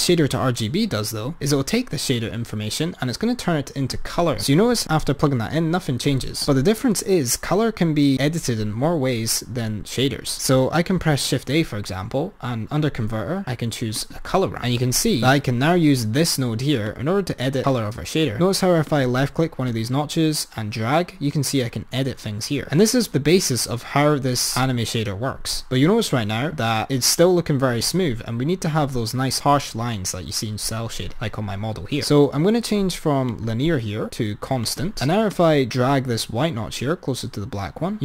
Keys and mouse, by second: 0.2 click, 5.3 drag, 6.3 click, 11.1 shift+a, 16.9-18.4 drag, 18.9-24.6 drag, 26.4-29.0 drag, 33.4-34.8 drag, 35.3-38.0 drag.